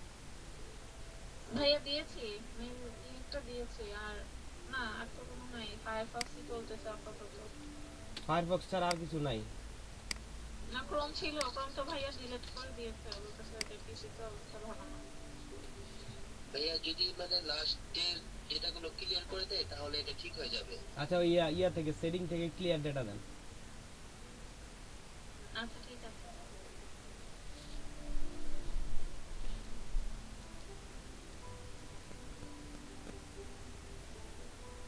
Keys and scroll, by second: 8.0 ctrl+c, 12.3 ctrl+v.